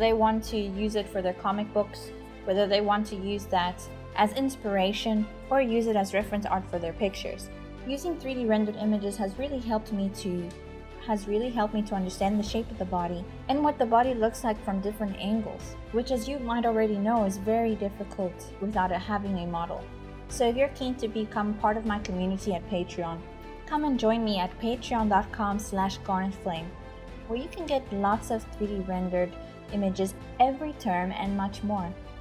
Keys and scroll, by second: 0.0-1.5 typing, 2.8-11.3 typing, 13.5-18.2 typing, 21.0-27.7 typing, 28.8-32.2 typing.